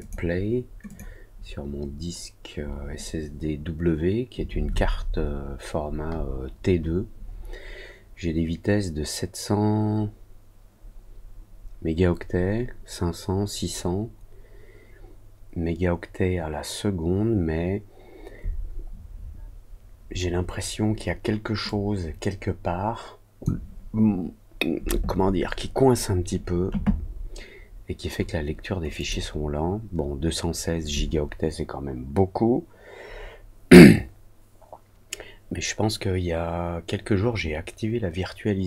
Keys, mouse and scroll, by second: 28.9 click.